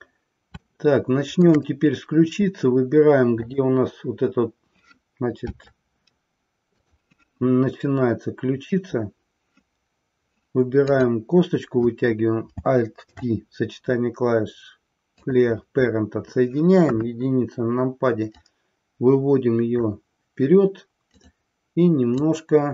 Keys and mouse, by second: 0.6 shift+middle click, 3.4 click, 6.8 click, 10.9 click, 13.0 alt+p, 16.8 KP_1, 18.4-19.9 drag, 22.2-22.7 drag.